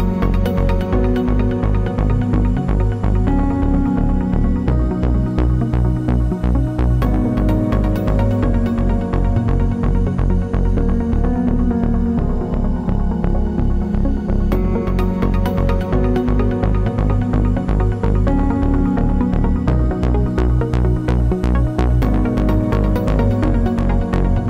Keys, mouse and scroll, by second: 7.9 Tab, 12.0 click, 13.8-18.8 drag, 19.1-21.5 drag, 22.4 shift+d.